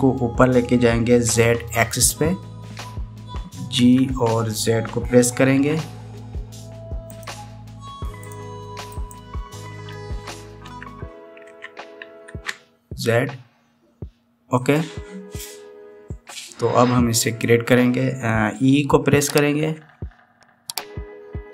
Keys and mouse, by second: 4.6 g, 6.3 z, 9.0 click, 9.7 click, 11.5 g, 20.5 e.